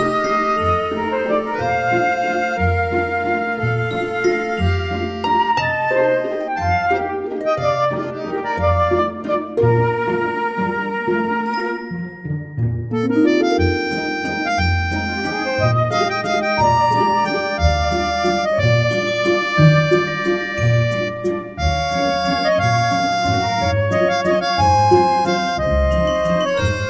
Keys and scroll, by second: 0.3-1.2 typing, 1.8 ctrl+z, 2.4 Delete, 2.9 Delete, 7.9 Tab, 11.7 Delete, 12.0 ctrl+shift+c, 12.1 ctrl+v, 18.5 Tab, 24.4 Tab.